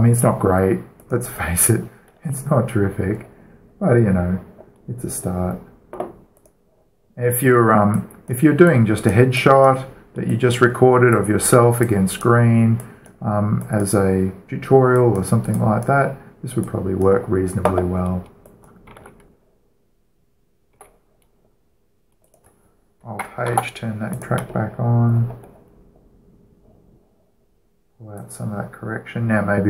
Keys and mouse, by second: 1.7-3.4 right drag, 7.0-8.6 right drag, 8.6 click, 11.5-19.8 drag, 19.6 alt+a, 21.6 alt+a, 24.2 alt+h, 26.6 middle click, 27.4 middle click, 27.6 middle click, 27.8 middle drag, 28.0-28.6 middle drag, 28.8-29.6 drag.